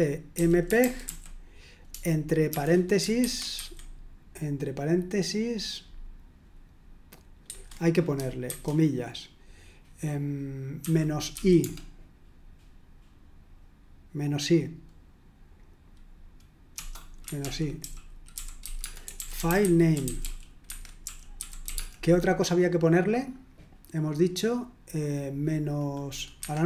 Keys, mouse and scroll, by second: 0.0-1.0 typing, 3.0-4.1 typing, 7.4 super+1, 8.5 shift+', 11.1-11.8 typing, 16.7-22.2 typing, 17.2 Escape, 26.3 Escape.